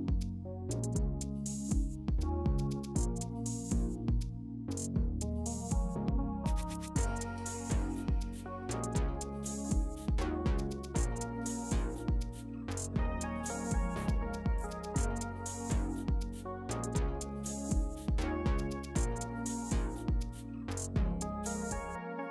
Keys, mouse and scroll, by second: 19.0 l.